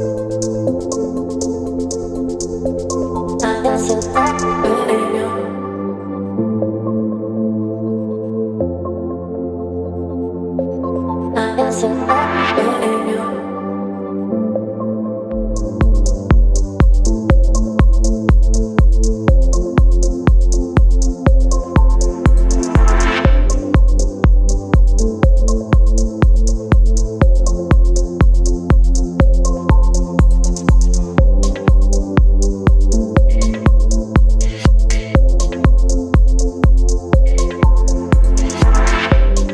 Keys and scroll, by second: 8.9 Return, 16.2 Return, 19.3 space, 22.3 space.